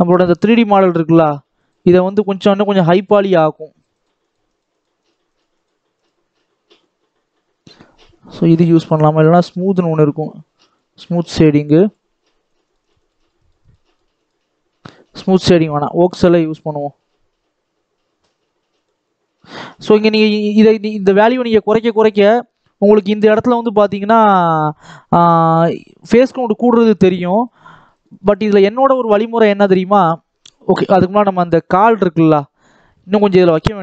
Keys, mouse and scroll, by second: 0.0-8.8 drag, 10.6 click, 11.8-15.6 drag, 16.3 click, 18.6-24.7 drag, 27.4-28.5 drag, 28.7 click, 29.8-31.2 drag, 31.2 scroll down 2, 31.4 middle click, 32.2-32.6 scroll up 1, 32.6-33.8 shift+middle drag.